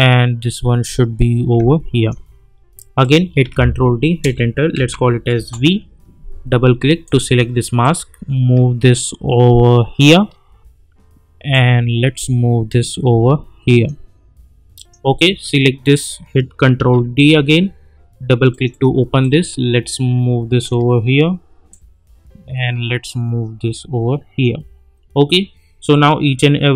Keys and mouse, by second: 3.4 ctrl+d, 4.2 Return, 4.8 v, 5.3 Return, 7.0-11.5 drag, 11.5-14.0 drag, 16.8 ctrl+d, 18.5-21.7 drag, 19.5-20.7 shift+drag, 22.0-24.5 drag.